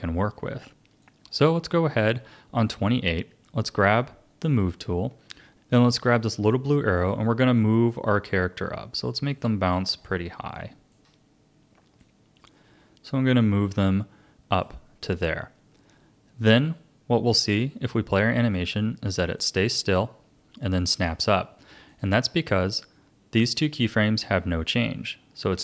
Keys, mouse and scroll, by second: 1.0-4.0 drag, 4.4-5.5 drag, 7.0 click, 9.7-10.3 scroll down 3, 10.5-12.0 shift+middle drag, 12.0 click, 17.5-22.0 drag, 22.5-25.5 drag.